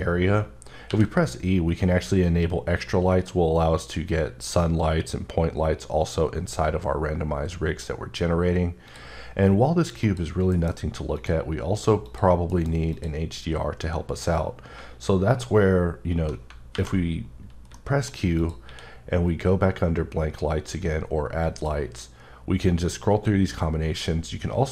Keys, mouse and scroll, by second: 0.3-0.8 scroll up 2, 0.8 e, 1.6 scroll up 2, 2.7 scroll up 2, 3.5 scroll up 2, 4.3-4.9 scroll up 1, 4.9-5.4 scroll up 2, 6.1 scroll up 10, 7.1 scroll up 1, 8.9 click, 10.0 click, 10.5 alt+m, 11.4 click, 12.0 click, 12.5 m, 12.9 click, 13.5 scroll down 1, 16.7 alt+v, 17.7 middle click, 18.4 click, 18.6 q, 21.4 click.